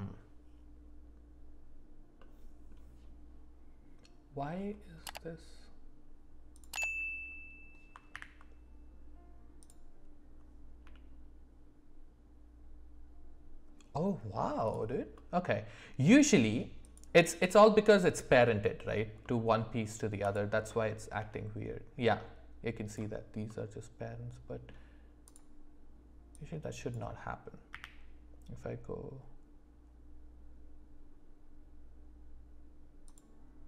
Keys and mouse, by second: 2.2 middle click, 6.5 click, 8.1 alt+p, 10.8 g, 15.1-16.3 middle drag, 16.8 click, 17.7 middle click, 19.2 middle click, 20.7 middle click, 21.2 g, 23.5-24.7 middle drag, 25.2 click, 26.3 click, 27.7 q.